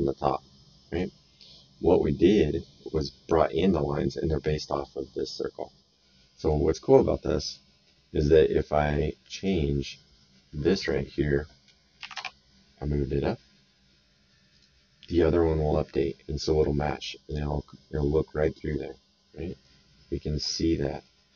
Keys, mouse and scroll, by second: 0.9 click, 5.2 click, 6.3 middle click, 7.4 click, 9.2 click, 10.6 click, 12.0 KP_1, 12.1 Return, 14.5 click, 17.3 click, 19.6 right click, 20.8 middle click, 21.2 right click.